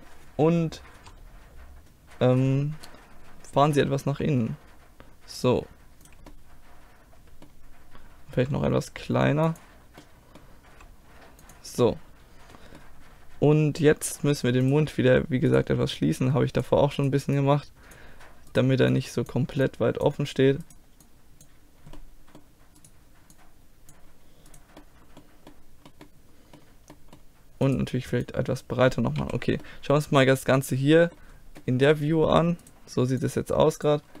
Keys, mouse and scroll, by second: 1.0 KP_7, 4.1 e, 6.3 click, 6.5 middle click, 7.3-8.4 drag, 8.4 s, 10.7 s, 14.7-17.9 drag, 15.5-17.9 right drag, 19.3 click, 20.3 click, 22.0-23.3 middle drag, 23.3 click, 23.4 middle click, 24.8-28.3 middle drag, 28.3-30.3 drag, 28.3-29.5 right drag, 29.2 z, 30.4 middle click, 31.2 click, 32.7-34.2 right drag, 33.2-34.2 drag, 33.2 middle click.